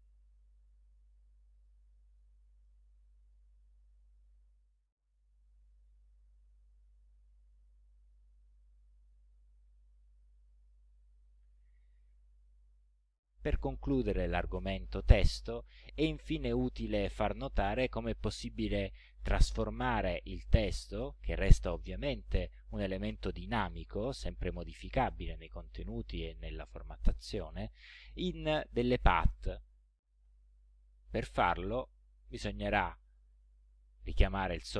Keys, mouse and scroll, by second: 0.1-1.9 drag, 2.2 middle click, 3.2 ctrl+scroll down 2, 7.4 click, 10.8-11.8 drag, 13.7-15.5 drag, 17.0-18.2 drag, 19.0-20.1 drag, 20.4 ctrl+scroll up 2, 21.2 ctrl+scroll up 2, 32.4 click.